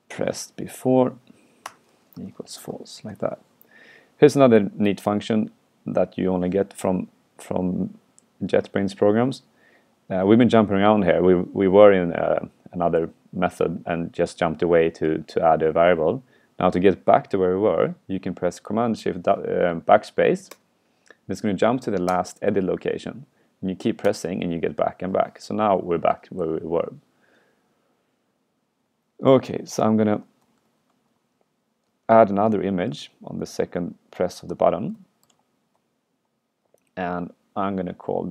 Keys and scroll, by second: 20.6 shift+super+BackSpace, 24.1 shift+super+BackSpace, 26.5 super+Right, 30.7 super+Left, 33.1 super+c, 34.5 super+Right, 35.0 super+Left, 35.4 super+v.